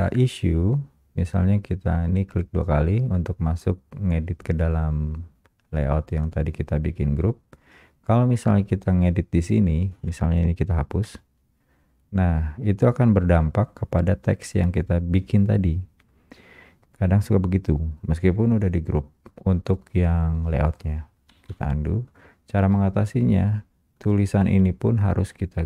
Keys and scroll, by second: 11.1 Return, 11.2 Delete, 21.3 Delete, 22.7 Escape.